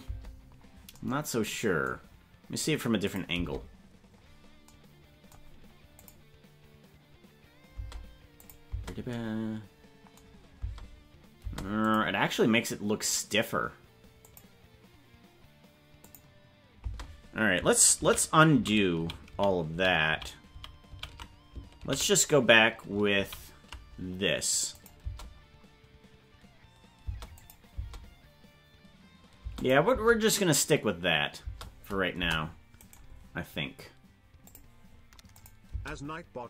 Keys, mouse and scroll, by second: 0.1 space, 3.1 click, 3.3 space, 6.0 click, 7.8 space, 8.4 click, 8.7 space, 10.6 space, 11.4 space, 11.9 click, 14.3 click, 16.1 click, 16.8 space, 18.0 ctrl+z, 18.6 ctrl+z, 19.2 ctrl+z, 19.4 ctrl+z, 19.8 ctrl+z, 20.2 ctrl+z, 20.6 ctrl+z, 21.0 ctrl+z, 22.0 ctrl+z, 24.8 click, 25.0 space, 27.0 space, 27.4 click, 27.7 space, 29.4 space, 29.6 click, 29.9 space, 31.4 space, 32.2 KP_0, 32.8 right click, 34.4 click, 35.4 click, 35.7 space.